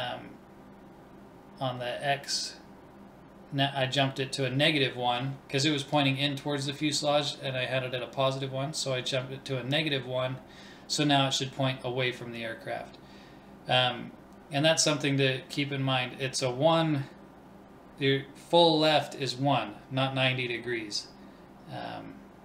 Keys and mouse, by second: 5.4 ctrl+s, 8.0-9.8 drag, 10.1-12.0 drag, 15.8-18.7 drag.